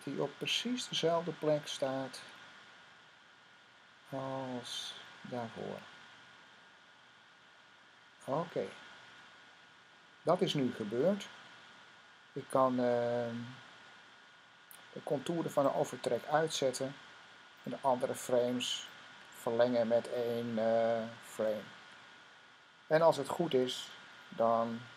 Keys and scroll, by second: 2.4 typing, 4.7 Right, 5.3 typing, 21.2 F5.